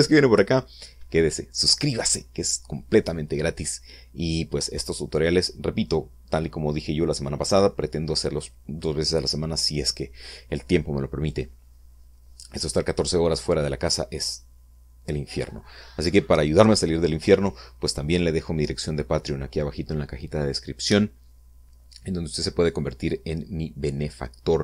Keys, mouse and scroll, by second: 0.0 scroll down 2, 0.8 scroll down 1.